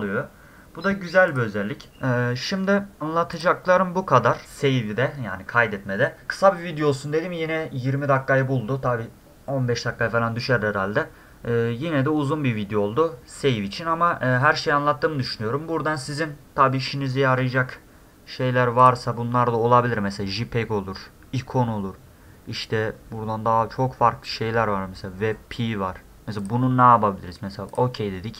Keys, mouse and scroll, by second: 1.3 click, 3.4 click, 17.4 ctrl+shift+s, 18.8 click, 26.4 click, 27.7 click.